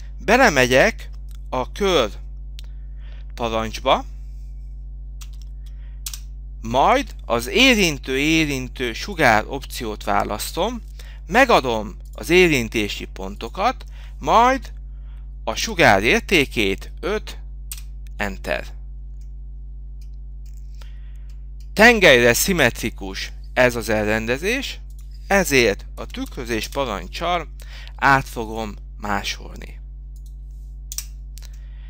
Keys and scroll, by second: 5.0 n, 6.0 Return, 7.7 Escape, 19.6 Return.